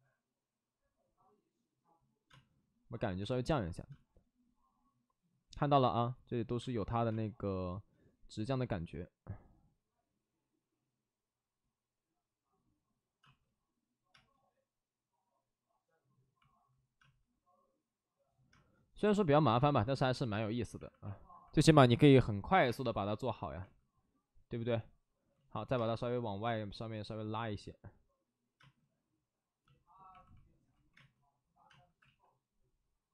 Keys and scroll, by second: 2.2 space, 3.8 space, 6.5 space, 7.0 space, 13.1 space, 14.0 space, 16.9 space, 18.4 space, 22.6 space, 25.2 ctrl+z, 25.7 space, 26.3 space, 28.5 space, 30.6 ctrl+z, 30.8 space, 31.6 space, 31.9 ctrl+z.